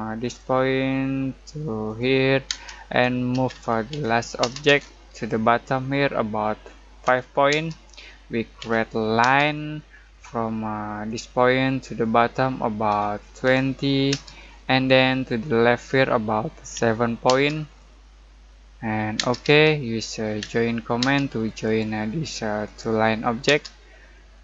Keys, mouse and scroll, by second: 0.2 click, 2.4-4.4 typing, 5.1 click, 7.0-7.5 typing, 8.5 l, 9.2 space, 9.5 middle click, 9.9-11.0 scroll up 1, 11.0 click, 12.8-14.1 typing, 16.7 7, 17.2 space, 17.7-19.1 middle drag, 19.1 space, 20.4 j, 21.0 space, 21.6 click, 23.4 space.